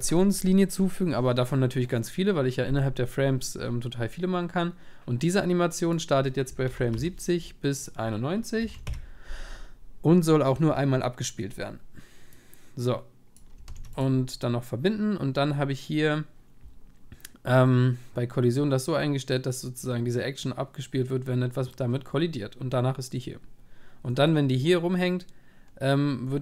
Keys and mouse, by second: 13.3-14.9 drag, 13.7 ctrl+s, 24.2-26.4 middle drag.